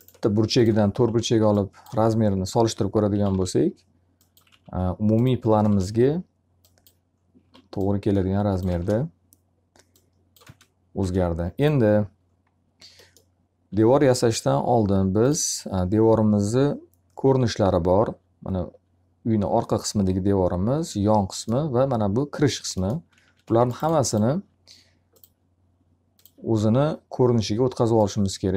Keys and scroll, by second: 3.2 w, 4.4 alt+r, 5.5 space, 7.3 s, 8.6 space, 22.7 alt+a, 23.4 b.